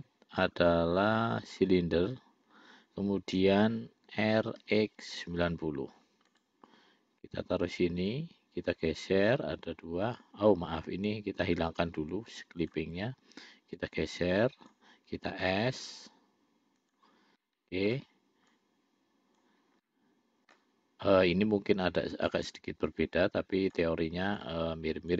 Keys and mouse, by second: 4.4 r, 7.5-8.5 drag, 9.0-10.6 drag, 11.8 ctrl+z, 12.9 click, 14.0-15.1 drag, 15.7 s, 17.7 middle click, 18.8 click, 20.1 middle click, 21.7-22.7 drag, 23.2 click, 24.7 click.